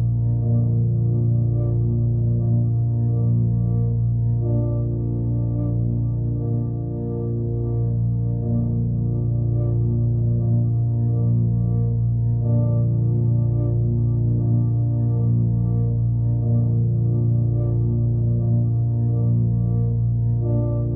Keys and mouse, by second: 5.2 click, 7.5-10.0 drag, 12.7 click, 14.2 click, 15.0 click, 15.4 click, 16.3-16.6 typing, 17.5 click, 18.4 click, 19.0 click, 19.6 click, 20.5 click.